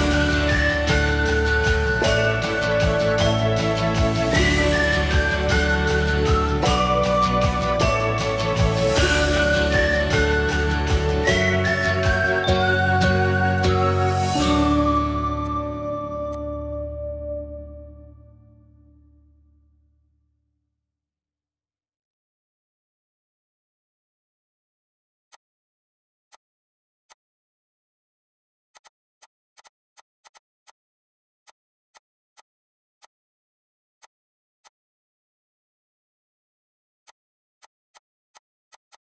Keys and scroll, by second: 5.1 Escape, 5.8 Escape, 8.1 Escape, 8.2 Escape, 8.5 Escape, 8.7 Escape, 8.7 Escape, 8.9 Escape, 36.0 2, 36.1 Return.